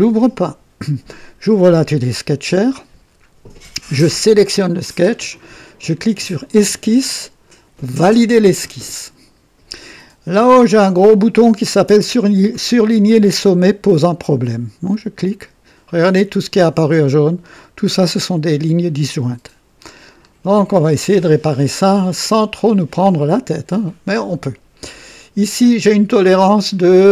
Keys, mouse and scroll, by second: 6.1 click, 8.0 click, 15.1 click, 17.2-17.9 scroll up 2, 20.1-20.4 scroll down 2.